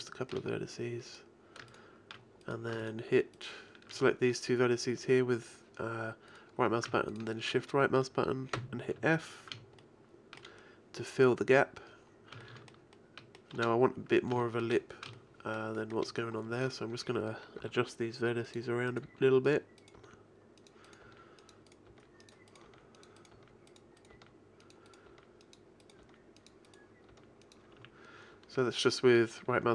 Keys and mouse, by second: 0.3 middle click, 1.7-2.8 right drag, 8.6 f, 9.0 a, 9.5 shift+KP_1, 17.6 g, 19.1 g, 20.0 g, 21.1-26.0 typing, 27.1 g, 27.8 a.